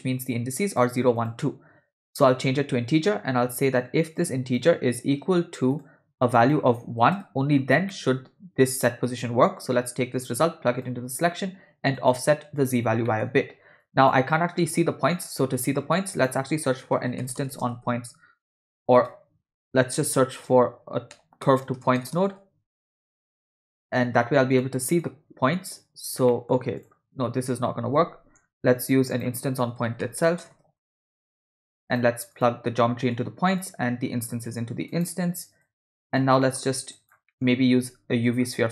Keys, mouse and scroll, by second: 1.2-2.4 drag, 3.8-4.3 drag, 4.5-5.9 drag, 6.4 click, 7.9 middle click, 8.8 drag, 9.9-10.9 drag, 12.0 click, 13.1 middle click, 13.8 click, 15.2 middle click, 15.5 shift+a, 26.3 middle click, 26.8 drag, 27.3-28.0 scroll down 1, 28.0 x, 28.5 shift+a, 33.1-33.7 drag, 34.3-35.0 drag, 35.7-36.3 drag, 36.4 middle click, 37.0 click, 37.3 middle click, 37.5 scroll down 1, 37.6 shift+a.